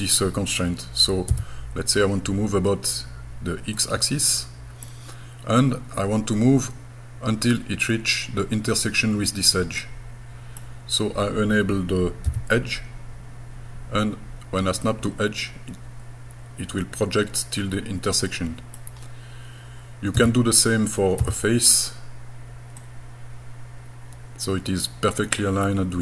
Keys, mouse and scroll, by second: 1.3 x, 3.8-4.9 middle drag, 9.8 middle click, 12.3 e, 14.9-18.8 middle drag, 20.2 e, 21.2 f, 22.8-25.7 middle drag.